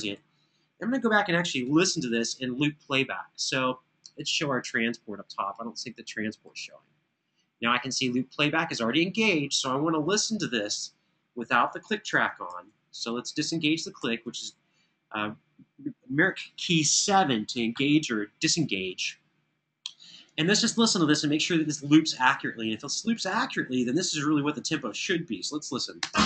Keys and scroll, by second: 0.0 Home, 1.4 alt+f, 12.2 super+1, 13.6 7, 25.8 space.